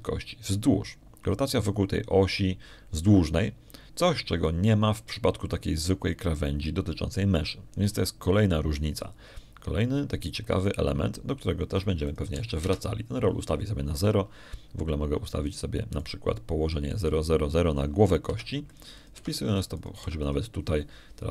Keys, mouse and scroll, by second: 0.2-6.5 drag, 12.5-13.8 drag, 14.2 click, 14.2 0, 14.5 Return, 17.8 right click, 18.9 click, 20.1 0, 20.6 click, 21.0 0.